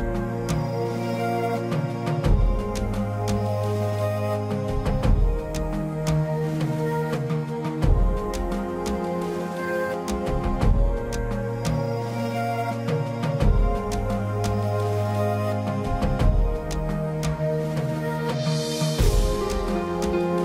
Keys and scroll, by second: 1.9 space, 4.8 ctrl+-, 5.1-7.1 typing, 8.2 space, 10.6 ctrl+=, 11.1 ctrl+=, 11.3 space, 13.9 space, 14.9 space, 15.7 space, 16.9 space, 17.5 ctrl+=, 19.5 space.